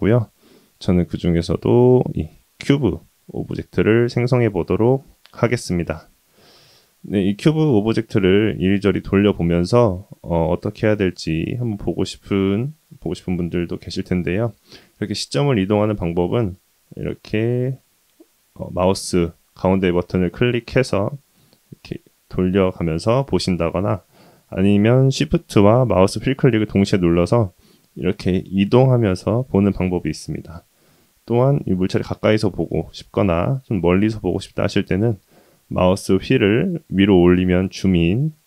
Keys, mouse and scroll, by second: 7.0-9.5 middle drag, 9.8-10.2 shift+middle drag, 10.5-10.9 shift+middle drag, 11.2-12.1 middle drag, 12.4-12.7 shift+middle drag, 13.1-13.8 middle drag, 14.1 shift+middle drag, 14.7-15.4 shift+middle drag, 15.7 shift+middle drag, 16.3-19.3 middle drag, 19.7-23.3 middle drag, 26.1-30.3 shift+middle drag, 31.7-32.2 scroll up 5, 33.4 scroll down 1, 33.5-35.1 scroll down 6, 35.1-36.5 scroll up 4, 36.7-37.1 scroll up 4, 37.8 scroll down 1, 38.0 scroll down 1.